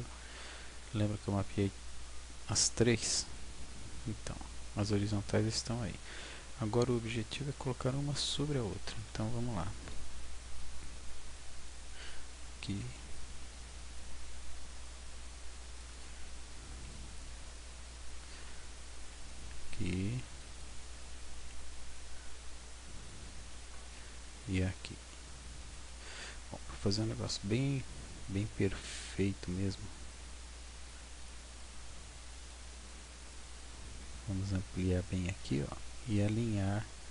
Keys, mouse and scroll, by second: 0.7-1.2 scroll up 1, 1.2-2.3 scroll down 3, 4.5 scroll up 6, 5.2-6.2 scroll down 4, 9.0 a, 10.0 b, 12.8 g, 16.7 click, 16.7 b, 19.1 g, 20.5 click, 21.4 b, 23.9 g, 25.7 click, 26.3-26.8 scroll up 5, 26.8 shift+middle click, 28.0 scroll down 4, 28.8 scroll down 1, 30.8 click, 32.4 click, 34.0 scroll, 35.0 m.